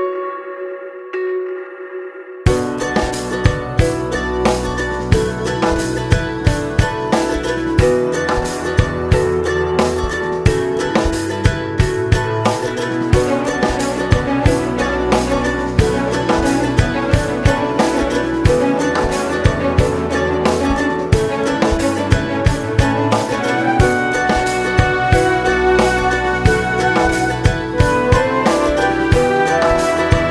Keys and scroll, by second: 5.4 Down, 22.4 ctrl+space, 22.7 ctrl+space, 22.8 ctrl+space, 22.9 ctrl+space, 23.4-24.9 ctrl+space, 27.2 ctrl+space, 27.7 ctrl+space, 27.8 ctrl+space, 27.8 ctrl+space, 28.0 ctrl+space.